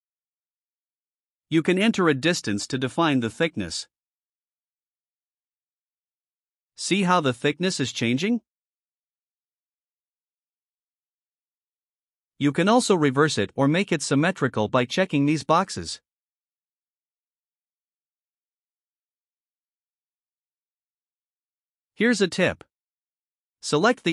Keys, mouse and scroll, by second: 4.2 click, 4.4 click, 4.6 click, 4.8 click, 6.0 click, 6.2 click, 6.4 click, 6.6 click, 7.7 click, 8.1 click, 8.5 click, 8.7 click, 9.0 click, 9.4 click, 14.7 click, 16.6 click, 18.3 click.